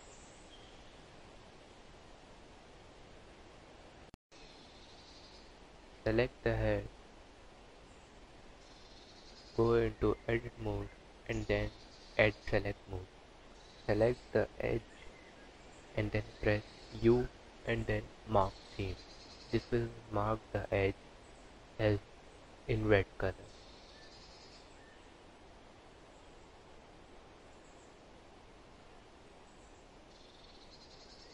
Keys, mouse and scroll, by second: 3.1 click, 6.2 2, 12.7 alt+click, 15.2 u, 22.8 click, 24.1 click, 25.3 scroll up 2, 27.9 alt+click, 30.2 u.